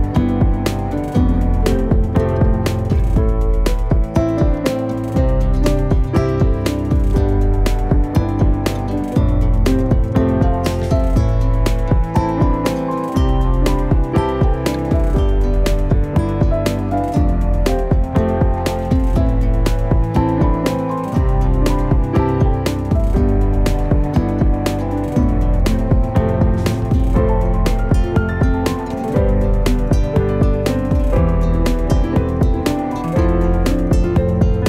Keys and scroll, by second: 5.2-7.9 typing, 9.8 Return, 14.6-18.0 typing, 19.2-19.9 typing, 26.4 Right, 26.4-28.6 typing, 29.1 Return.